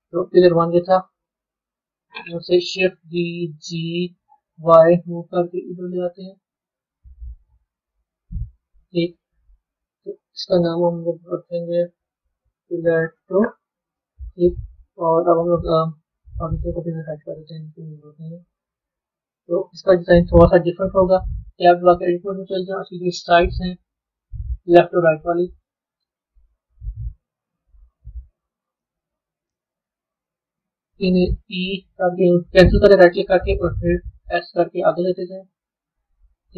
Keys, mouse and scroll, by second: 0.4 drag, 1.5 KP_3, 3.0 shift+d, 6.8-9.5 middle drag, 9.5-10.0 scroll down 2, 10.0 click, 11.9 BackSpace, 12.1 BackSpace, 12.4 BackSpace, 16.3 click, 17.7 drag, 18.4-19.2 scroll up 4, 19.2-21.6 middle drag, 21.6 b, 23.1 click, 23.7-25.3 middle drag, 25.3 shift+click, 27.8 KP_1, 29.2 KP_3, 30.1 KP_1.